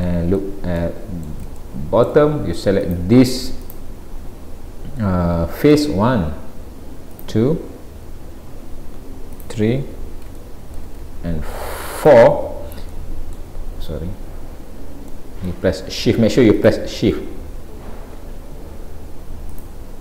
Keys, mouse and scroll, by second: 0.0 middle click, 0.0-0.8 scroll up 1, 0.8 middle click, 1.6 shift+middle click, 2.8 click, 3.7 click, 7.2 shift+click, 8.2-8.6 scroll up 1, 9.4 shift+click, 10.4 shift+middle click, 12.0 click, 12.5-12.9 scroll down 3, 12.9 middle click, 14.2-15.0 scroll up 3, 15.2 middle click, 16.6 shift+click, 17.2-18.0 scroll down 3, 19.6 shift+click.